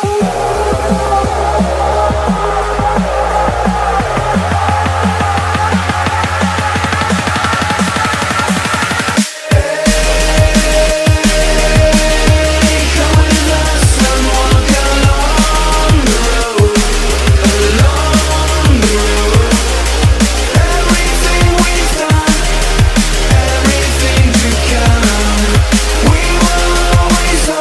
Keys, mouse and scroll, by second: 0.6-5.2 drag, 9.9 click, 11.7 scroll down 1, 15.0 scroll down 1, 15.6-16.2 scroll down 1, 16.5 F11, 16.6 F10, 17.3 click, 17.7 right click, 18.9 click.